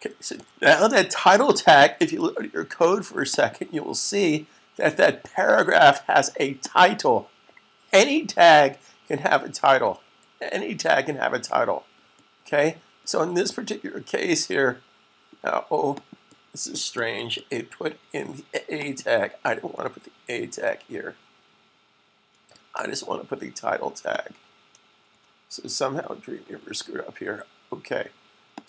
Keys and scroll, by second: 0.3 s.